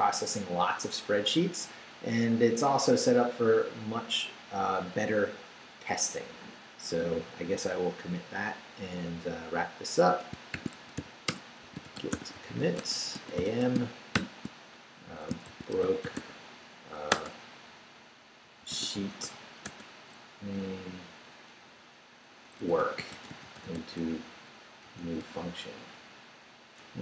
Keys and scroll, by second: 10.3-14.1 typing, 15.2-17.1 typing, 18.4-19.7 typing, 22.3-25.5 typing, 26.8 BackSpace.